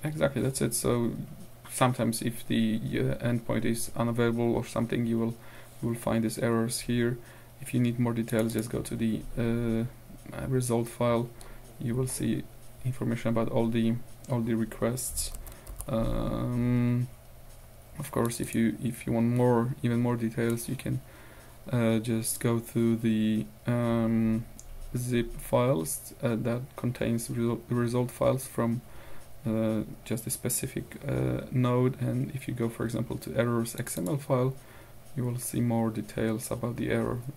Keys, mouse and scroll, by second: 8.3 click, 10.9-12.2 scroll down 2, 12.2-13.3 scroll up 2, 13.3-13.9 scroll down 2, 13.9-14.5 scroll down 1, 14.5-15.0 scroll up 2, 15.0 scroll up 1, 15.4 ctrl+w, 15.8 ctrl+q, 20.5-22.6 drag, 33.8 click, 35.4-36.3 scroll down 1, 36.3-37.3 scroll up 1.